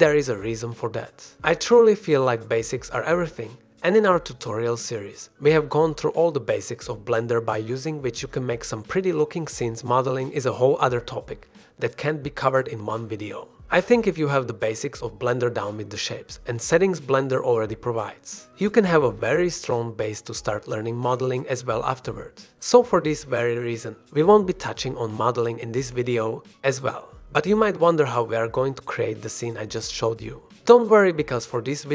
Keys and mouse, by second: 0.3 ctrl+b, 25.6 ctrl+b.